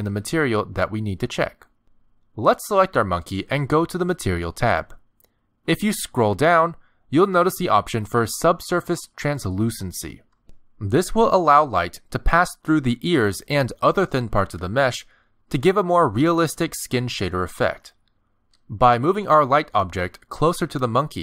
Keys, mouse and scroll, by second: 0.3 shift+middle click, 2.3-3.4 scroll down 5, 3.8-7.3 scroll down 33, 11.1 click, 12.4 middle click, 12.9-13.8 scroll down 1, 13.8 scroll down 2, 14.3 shift+middle click, 14.8 g, 16.7-20.6 typing, 19.5 click, 20.2 middle click, 21.0 middle click.